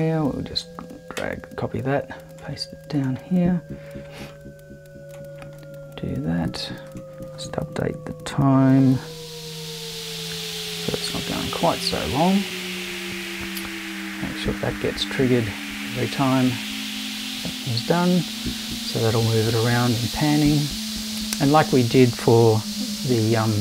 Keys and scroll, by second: 8.5 BackSpace, 9.9 BackSpace, 10.3 5, 11.1 0.